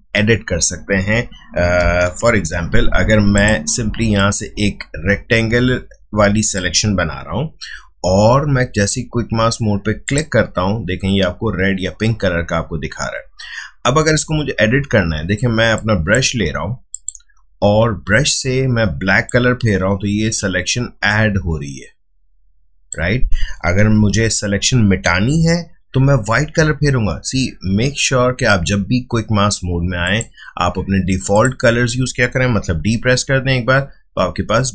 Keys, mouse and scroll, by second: 2.1 ctrl+d, 3.3-9.0 drag, 10.0 click, 15.7 click, 19.2-23.9 drag, 23.9 ctrl+z, 30.0 click, 32.7 d.